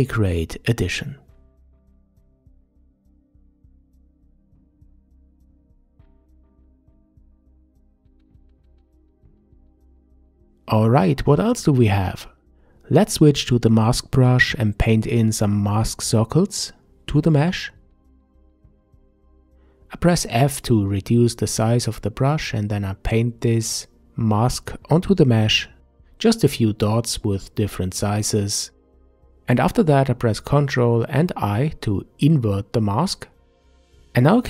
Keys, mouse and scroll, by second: 0.5 middle click, 0.9 click, 1.4 middle click, 1.9 click, 2.3 middle click, 2.7 click, 3.5 middle click, 3.9 click, 4.3 middle click, 4.6 click, 4.9 middle click, 5.3-6.8 drag, 6.8 middle click, 7.1-8.7 drag, 8.7 middle click, 9.4-10.7 drag, 10.7-11.4 middle drag, 11.4 ctrl+s, 12.1 n, 15.4 click, 16.1-19.1 middle drag, 20.2 f, 21.6-22.0 scroll up 3, 22.0 click, 24.1 f, 24.5 click, 25.5-27.9 drag, 27.9 scroll down 5, 28.1-29.7 middle drag, 29.7 alt+i, 32.5 ctrl+i.